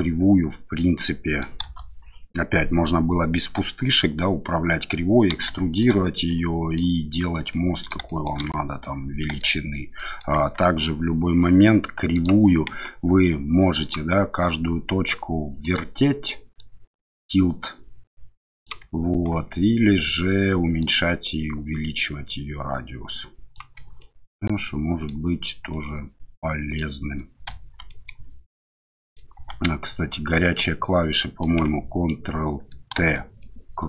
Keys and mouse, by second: 0.7-1.4 middle drag, 1.6 KP_1, 5.5-5.8 shift+middle drag, 6.3-6.8 middle drag, 7.5-7.9 middle drag, 8.1 shift+middle drag, 8.8-9.4 middle drag, 9.9 drag, 10.3 Tab, 12.2 click, 12.6 Tab, 13.7 click, 15.6 click, 16.7-18.7 drag, 19.3 ctrl+z, 20.8-23.5 drag, 24.0-25.1 middle drag, 25.7-26.8 middle drag, 27.6 Tab, 27.9-29.1 middle drag, 29.3 Tab, 31.1 click, 32.9 ctrl+t.